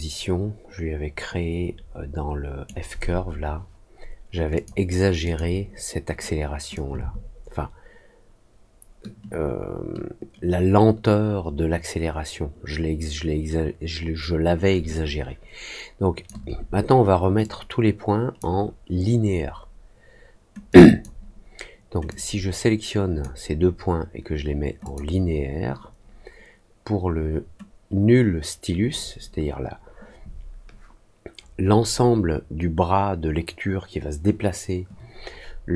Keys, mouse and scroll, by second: 4.5 click, 5.2 click, 6.7-16.2 shift+drag, 17.3-18.3 drag, 20.6 click, 22.0-23.1 drag, 24.8 click.